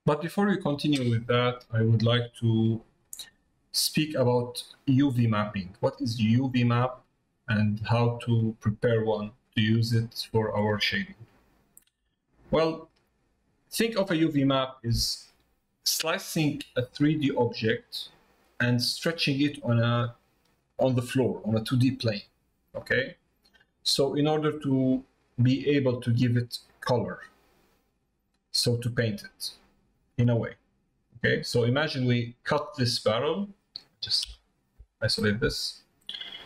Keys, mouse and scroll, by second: 3.1 middle click, 4.2 middle click, 5.7 middle click, 6.7 middle click, 8.1 middle click, 9.1 middle click, 10.2 middle click, 11.3 shift+middle click, 12.7 shift+middle click, 34.2 KP_Divide, 35.2 middle click.